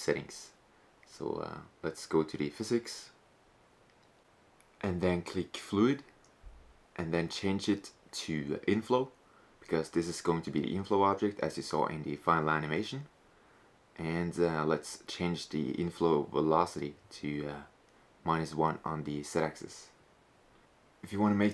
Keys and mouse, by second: 0.4-3.4 middle drag, 3.4-5.3 drag, 5.7-8.4 drag, 14.7-16.6 drag, 19.9 s.